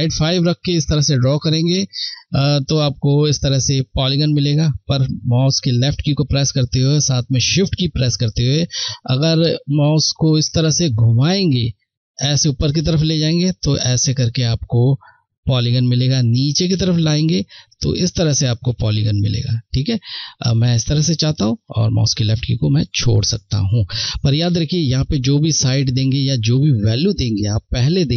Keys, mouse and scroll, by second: 0.0 shift+click.